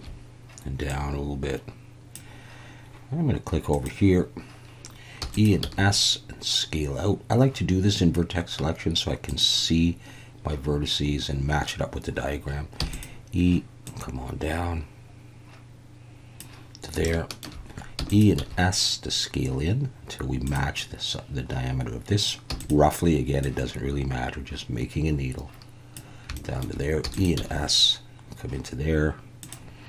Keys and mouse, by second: 0.9 click, 3.7 click, 5.2 e, 5.3 click, 5.6 s, 9.3 click, 12.8 e, 12.9 click, 13.8 click, 17.1 shift+middle click, 18.0 e, 18.1 click, 18.4 s, 20.5 click, 22.5 e, 22.6 click, 23.5 click, 26.4 shift+click, 27.0 e, 27.1 click, 27.4 s, 29.4 click.